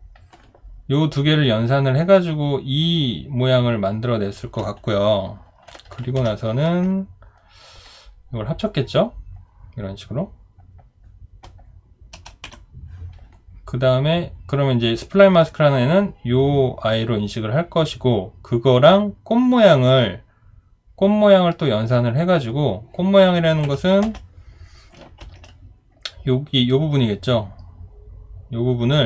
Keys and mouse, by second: 12.4 Delete, 23.6 Escape, 24.0 b, 25.2 ctrl+d.